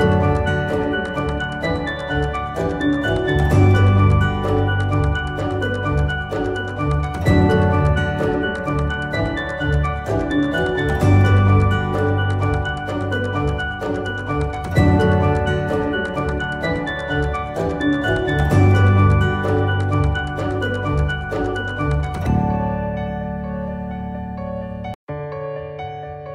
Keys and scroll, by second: 6.0 Delete.